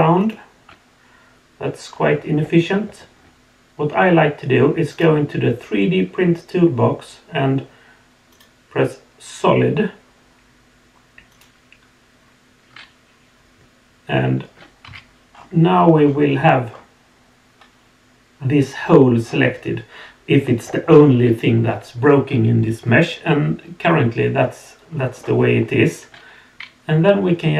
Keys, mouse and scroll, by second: 0.2 shift+click, 4.9 click, 8.3 click, 11.3 click, 14.9 z, 15.3 scroll down 2, 16.0 scroll up 2, 16.7 scroll down 1, 19.2 scroll down 1, 19.7 scroll down 2, 20.4-25.1 middle drag, 25.4-27.5 scroll up 3.